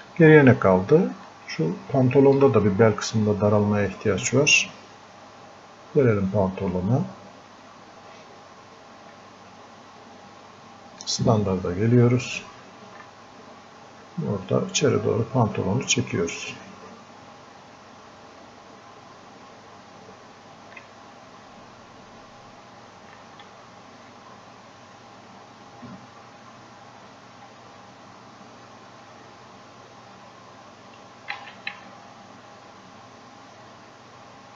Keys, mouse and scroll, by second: 0.1 click, 1.3 alt+click, 3.1-5.4 drag, 5.4-7.8 drag, 7.8-10.9 drag, 11.2 click, 13.2 alt+click, 14.7 alt+click, 15.5 alt+click, 19.3 alt+click, 21.5-23.2 drag, 24.2 click, 26.2 click, 31.4 ctrl+z, 32.0 alt+click, 33.3-34.5 alt+drag.